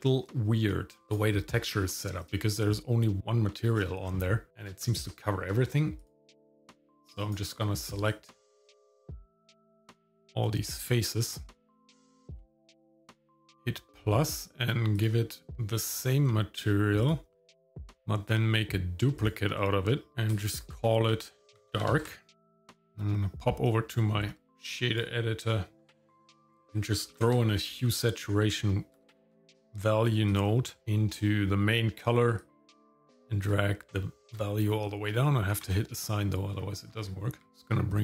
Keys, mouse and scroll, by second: 0.3 Tab, 1.0 click, 1.0 shift+middle click, 2.2 click, 3.7-4.3 scroll up 4, 4.5 shift+middle click, 5.5 shift+middle click, 6.0 click, 6.8 click, 8.1 shift+click, 8.5 shift+middle click, 8.9 shift+click, 9.1 scroll up 2, 9.3 shift+click, 9.4 shift+middle click, 9.6 shift+click, 9.8 ctrl+z, 10.0 ctrl+z, 10.1 shift+middle click, 10.2 shift+click, 11.3 shift+middle click, 12.0 ctrl+KP_Add, 12.1 ctrl+KP_Add, 12.2 ctrl+KP_Add, 12.4 ctrl+KP_Add, 12.6 scroll down 3, 12.8 shift+middle click, 13.5 click, 14.9-17.1 drag, 19.2 click, 20.1-22.1 drag, 20.5 BackSpace, 20.6 BackSpace, 22.8 click, 23.6-25.0 drag, 25.5 middle click, 25.9 scroll up 1, 26.2 shift+a, 29.1 BackSpace, 32.4-34.3 drag, 35.6 click, 36.5-37.4 scroll up 3, 37.4 Tab, 37.5-38.0 shift+drag.